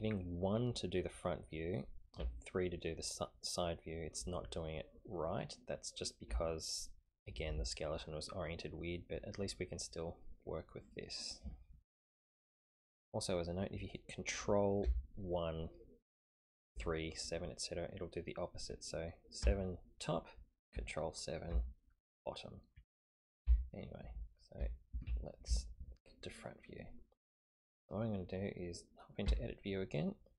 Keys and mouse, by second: 2.2 KP_3, 6.3 KP_1, 12.4-13.3 middle drag, 14.8 ctrl+KP_1, 19.4 KP_7, 21.5 ctrl+KP_7, 23.4 KP_1, 24.6 KP_3, 29.3 Tab.